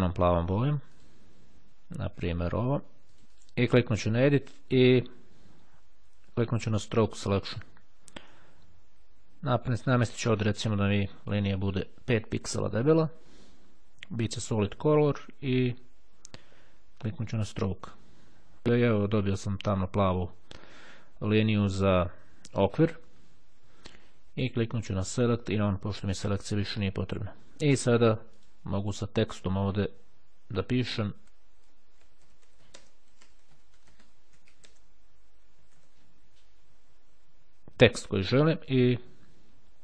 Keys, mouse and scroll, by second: 0.5 click, 2.3 click, 3.1 click, 3.5 click, 4.1 click, 7.3 click, 9.8 click, 11.3 click, 12.7 KP_5, 17.2 click, 24.9 click, 25.7 click, 28.3 click, 29.3 click, 31.2-35.8 typing.